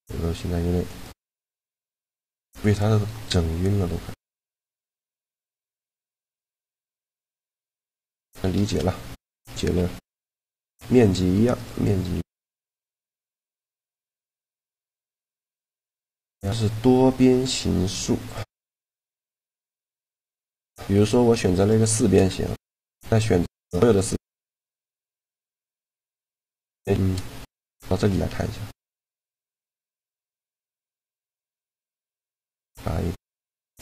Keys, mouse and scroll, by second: 1.8 right click, 1.8 shift+g, 5.0-8.1 drag, 5.0 right click, 6.8 shift+space, 8.1 shift+space, 9.5 n, 11.1 Tab, 11.4-13.0 drag, 11.4-13.0 right drag, 11.6 Tab, 14.1 shift+g, 18.8-21.1 middle drag, 21.2-23.1 right drag, 21.6 shift+g, 27.2 Tab, 27.3-29.0 right drag, 27.6 Tab, 28.8 a, 30.5 a, 30.8 KP_Decimal, 32.9-33.8 drag, 32.9-33.8 right drag.